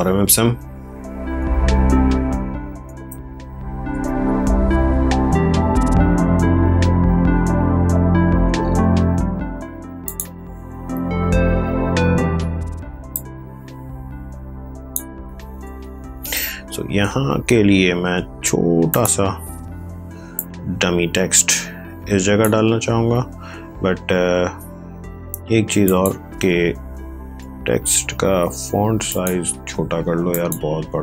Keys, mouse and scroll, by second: 0.4-3.5 typing, 3.8 ctrl+Return, 8.5 scroll down 1, 10.0 click, 11.8 scroll down 1, 13.1-15.2 drag, 15.2 ctrl+c, 15.7 alt+Tab, 18.8-23.0 drag, 23.0 ctrl+v, 25.8 click, 26.7 ctrl+a, 29.0 click.